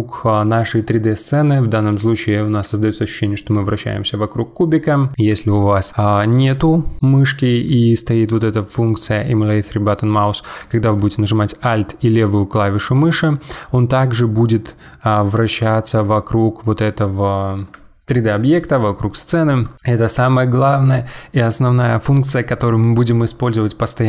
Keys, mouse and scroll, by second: 10.9-14.0 middle drag.